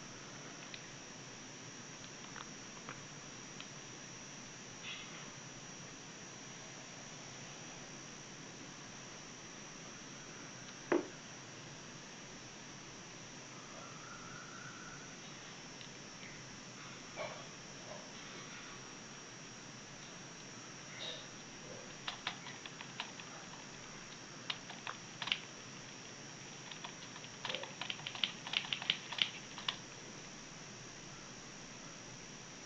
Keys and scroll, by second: 4.0 w, 7.0 space, 9.9 w, 12.2 w, 21.8 a, 23.0 a, 26.6 s, 29.3 a, 30.9 w.